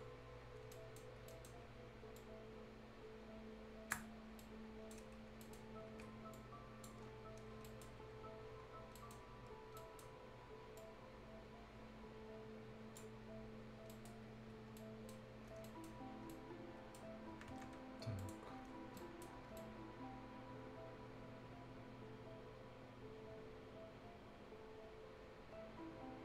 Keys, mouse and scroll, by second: 0.7-1.3 shift+scroll up 2, 0.7 shift+right click, 1.3 shift+right click, 2.2-4.4 drag, 4.4 right click, 5.1 scroll up 1, 5.4 right click, 6.3 click, 7.1 scroll down 1, 7.5 scroll up 1, 7.6 right click, 8.8 scroll down 1, 9.0 right click, 9.2-9.8 scroll up 1, 9.8 right click, 10.2-10.8 scroll up 1, 10.8-13.7 drag, 13.7 scroll down 1, 13.9 right click, 14.5 scroll up 1, 14.8 right click, 15.4 scroll up 1, 15.6 right click, 16.0 scroll down 1, 16.3 right click, 17.0 scroll down 1, 17.3 Escape, 18.2 click, 18.6 scroll down 1, 18.8 scroll up 1, 19.0 right click, 19.0 right click, 19.3 scroll down 1, 19.6-26.2 right drag.